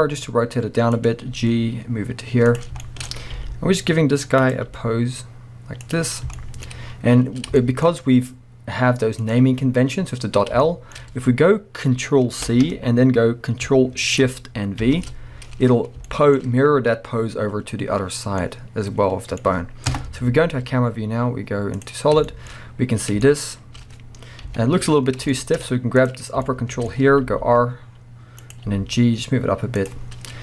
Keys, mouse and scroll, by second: 1.3 g, 2.6 click, 2.8-3.3 shift+scroll up 2, 2.9-4.5 shift+middle drag, 3.4 r, 4.5 click, 4.7 g, 5.9 click, 6.1-6.4 scroll down 2, 6.4-9.2 shift+middle drag, 6.9-7.3 scroll down 2, 7.3-8.0 scroll up 5, 9.2-10.6 drag, 10.6-21.2 shift+middle drag, 12.4 ctrl+c, 14.9 ctrl+shift+v, 15.6-16.1 scroll down 1, 18.0-18.4 scroll down 1, 19.9 KP_0, 20.6 z, 22.0 scroll down 2, 22.3-26.0 shift+middle drag, 22.5-23.2 scroll up 2, 24.5 KP_1, 25.0 scroll up 2, 25.6-26.0 scroll up 2, 26.0 click, 26.3-27.3 shift+middle drag, 26.3 scroll down 2, 26.9-27.3 scroll up 2, 27.3 r, 28.5 click, 28.7 g, 29.9 click, 30.1-30.4 scroll down 1.